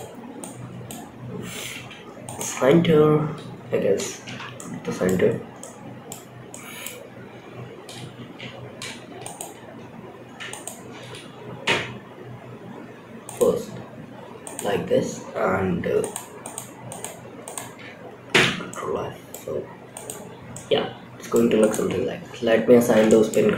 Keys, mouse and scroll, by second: 1.0 m, 3.4 ctrl+z, 3.9 middle click, 4.6-4.9 scroll up 2, 4.9 middle click, 5.8 middle click, 8.5 shift+click, 9.8 shift+click, 10.9 m, 13.7 click, 15.3 shift+click, 15.7 shift+click, 16.2 shift+click, 16.7 shift+click, 17.6 f, 18.0 middle click, 18.8-19.2 scroll up 2, 19.2 click, 19.8 middle click, 20.9 click, 21.2-22.1 scroll down 7, 22.4 shift+middle click, 22.8 scroll up 2, 23.3 shift+click.